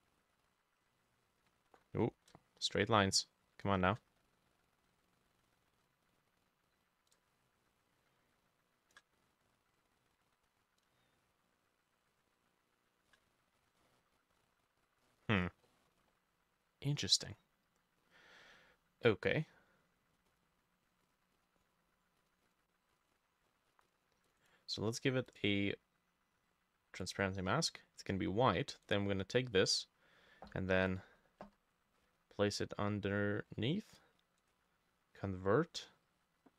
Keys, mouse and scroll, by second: 0.6 b, 0.9-2.0 shift+middle drag, 1.7 ctrl+z, 2.1 v, 2.4-4.2 shift+middle drag, 7.2-10.9 shift+drag, 7.2-9.2 shift+middle drag, 10.9-13.3 shift+middle drag, 13.6 scroll down 2, 14.5-15.0 scroll up 1, 15.1 middle click, 15.3-15.7 scroll up 2, 15.7 middle click, 16.0-16.7 scroll down 1, 21.4 double click, 22.5 double click, 23.0 double click, 23.2 double click, 23.9 double click, 24.3 double click, 24.4 right click, 28.9 right click, 30.8 Escape, 31.5 Escape, 34.4 right click.